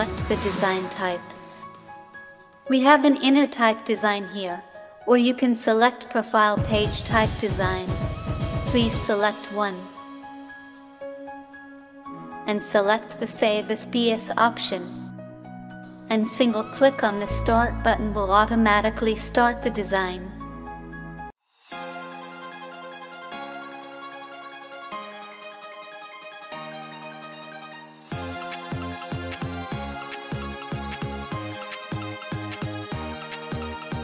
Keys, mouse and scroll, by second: 15.1-16.3 drag.